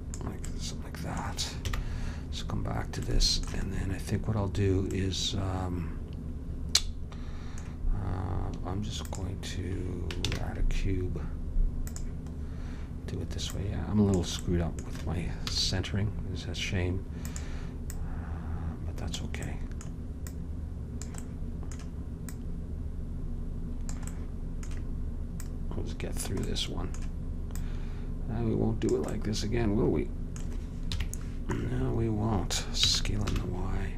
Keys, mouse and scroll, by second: 1.7 KP_1, 9.1-10.4 drag, 10.4 shift+a, 13.5-15.6 drag, 15.6 s, 18.0-19.8 drag, 19.8 middle click, 20.4-22.2 drag, 22.2 middle click, 22.4-24.2 drag, 24.2-25.5 middle drag, 25.5-27.4 drag, 27.6-29.4 drag, 29.4-31.0 middle drag, 31.0 KP_3, 32.9 s.